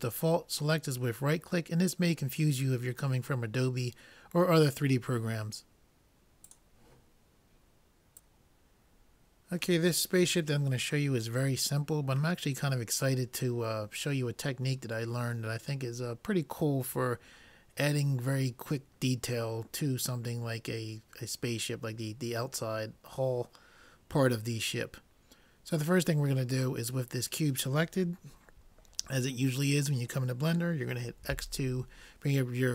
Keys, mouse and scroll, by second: 8.2 n, 31.2 x.